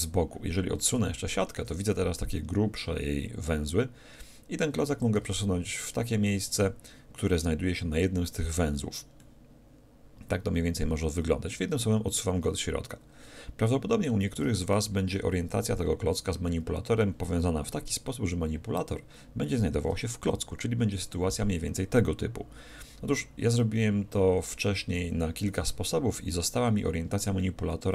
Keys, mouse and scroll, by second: 1.2-2.9 middle drag, 5.1-7.0 drag, 9.2-11.1 middle drag, 21.0 ctrl+,, 23.5-26.9 middle drag.